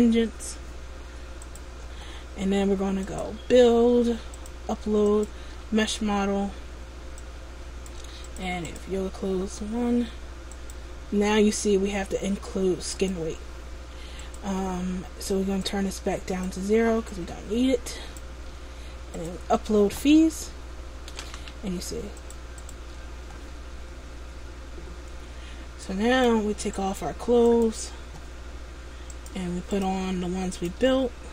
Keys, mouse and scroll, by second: 0.3 click.